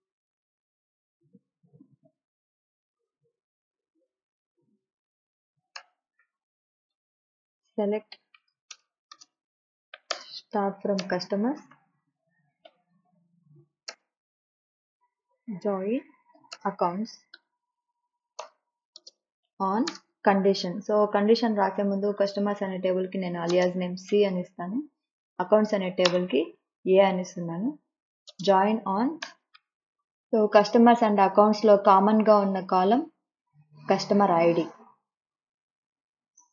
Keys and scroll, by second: 5.8-7.6 typing, 8.7 Return, 9.1-13.9 typing, 15.5-20.1 typing, 18.4 Return, 23.2 Right, 23.5 space, 24.0 c, 26.0 space, 26.4 a, 28.2 space, 29.2 BackSpace.